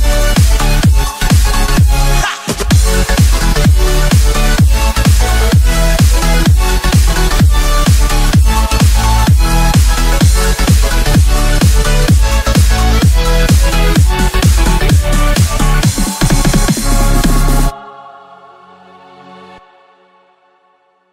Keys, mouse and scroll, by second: 1.1 shift+d, 4.4 click, 4.9-5.3 scroll down 3, 5.3-8.9 middle drag, 8.9 scroll down 2, 9.2-12.8 middle drag, 12.8-13.8 scroll up 4, 14.4 KP_7, 15.2-15.6 scroll down 1, 15.6-19.3 middle drag, 20.5 KP_7.